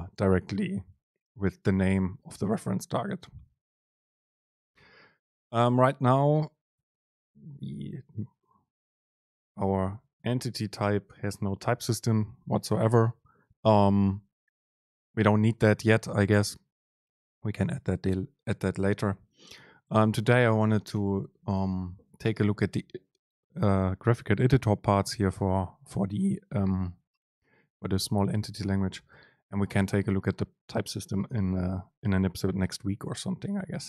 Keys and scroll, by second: 4.9 BackSpace, 5.6 BackSpace, 6.8 super+Left, 8.9 ctrl+shift+super+t, 10.1 ctrl+shift+super+t, 15.5 End, 20.0 Down, 21.0 Down, 25.2 Up, 29.2 End, 29.8 Return.